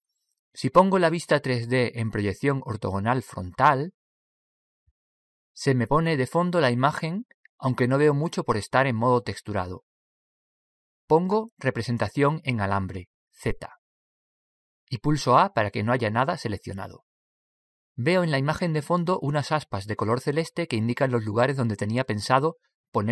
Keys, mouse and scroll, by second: 5.9 KP_1, 7.0-8.1 scroll down 1, 8.1-11.7 middle drag, 12.7 z, 14.0 z, 16.5 a, 17.4-19.1 middle drag.